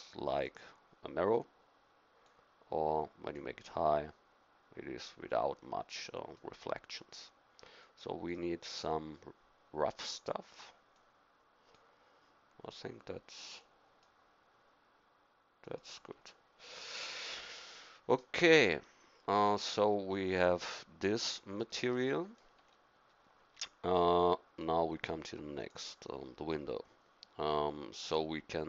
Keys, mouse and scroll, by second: 2.5-4.7 drag, 5.0-7.7 drag, 8.2-9.7 drag, 10.9-13.0 drag, 13.5-15.4 drag, 15.6-17.7 drag, 19.8 middle click, 21.7 middle click.